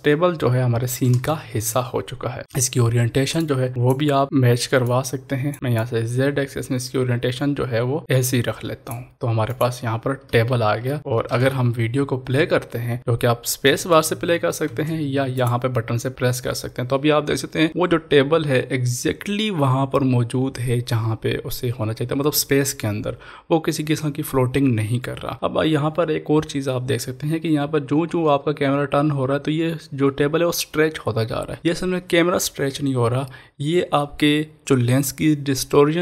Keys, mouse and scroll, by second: 1.1 ctrl+s, 3.4 ctrl+s, 3.4 click, 4.2 ctrl+z, 4.8 click, 5.5 ctrl+z, 5.8-9.5 drag, 13.7 ctrl+s, 13.9 space, 15.3 click.